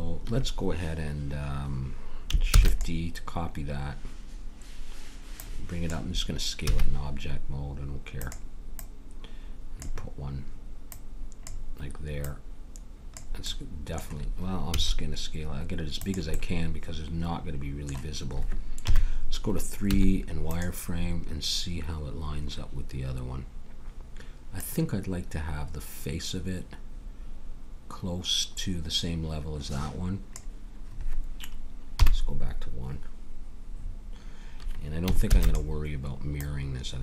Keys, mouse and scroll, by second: 2.5 shift+d, 5.4-7.1 drag, 6.7 s, 8.8-10.5 drag, 10.8-14.0 drag, 13.5 middle click, 14.7 s, 18.8 KP_3, 19.9 z, 24.6-26.3 drag, 31.9 KP_1, 35.3 shift+d, 36.4-37.0 drag.